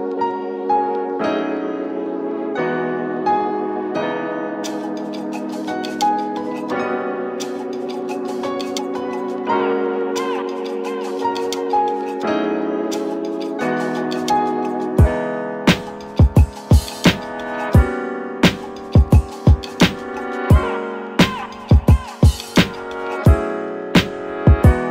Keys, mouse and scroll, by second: 1.4-4.8 middle drag, 4.8-5.6 drag, 5.6-6.7 middle drag, 6.7-15.8 drag, 19.5-20.1 scroll down 1, 20.1-21.0 middle drag, 21.0-22.1 scroll up 4, 22.1-23.6 scroll up 1, 23.6 click.